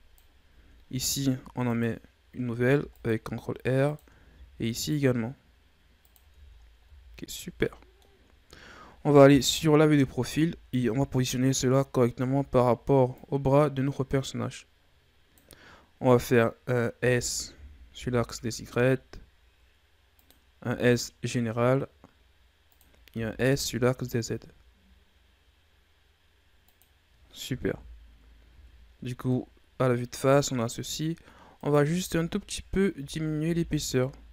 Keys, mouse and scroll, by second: 0.8 ctrl+r, 2.6 ctrl+r, 6.4 Tab, 6.6-7.4 scroll down 6, 6.8 a, 7.4-8.3 middle drag, 8.3-9.3 scroll down 2, 9.3 KP_3, 10.3 Tab, 10.9 a, 12.2 a, 13.1-16.2 drag, 16.9 s, 20.7 s, 23.1 s, 27.7 KP_1, 28.5 Tab, 28.9-29.3 scroll down 2, 29.3-30.9 middle drag, 30.9-31.6 scroll up 5, 31.6 right click, 32.1 Tab, 33.0 a, 33.4 x.